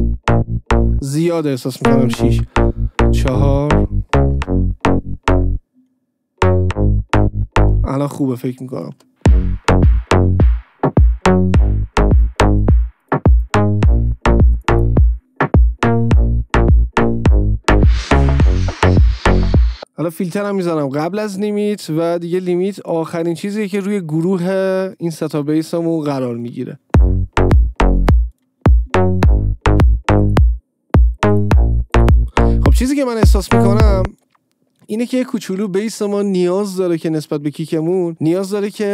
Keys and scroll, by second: 2.6 Return, 4.7 Return, 8.1 space, 26.9 space, 34.1 space.